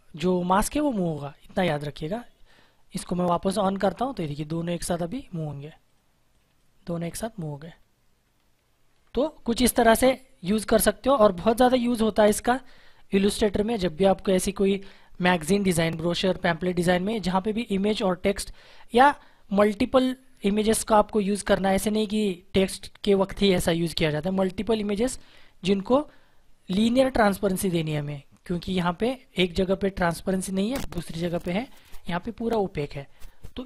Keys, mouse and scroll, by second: 0.8 z, 2.4 click, 3.5 click, 5.8 click, 7.9 ctrl+z, 10.4 click.